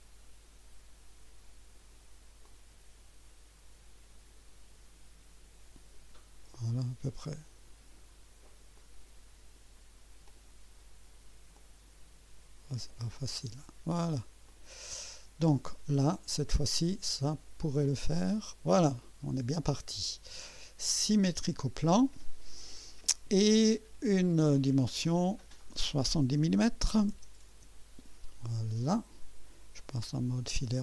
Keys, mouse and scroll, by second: 2.4-6.1 drag, 8.7 click, 10.2 click, 11.5 click, 14.4 click, 17.8 click, 21.1 click, 25.2 click, 26.9 KP_7, 27.1 KP_0, 27.5 Return.